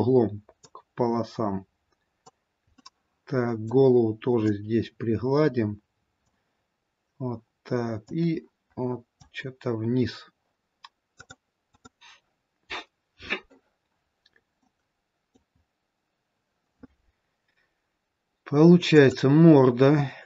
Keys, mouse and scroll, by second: 1.0 click, 3.0 middle click, 5.0 click, 8.4 click, 14.0-14.8 scroll up 2, 14.8 middle click, 15.8-17.1 scroll up 1, 17.1-17.5 scroll up 1, 19.6 click.